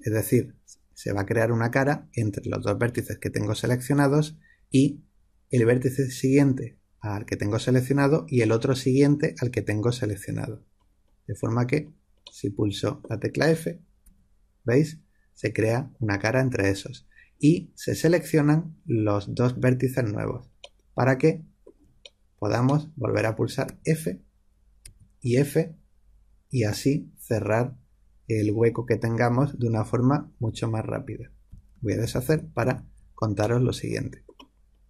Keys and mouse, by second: 13.9 f, 20.6-24.7 middle drag, 23.6 f, 24.7 f, 32.0 ctrl+z, 32.2 ctrl+z, 32.5 ctrl+z, 33.3-34.8 middle drag, 34.4 click.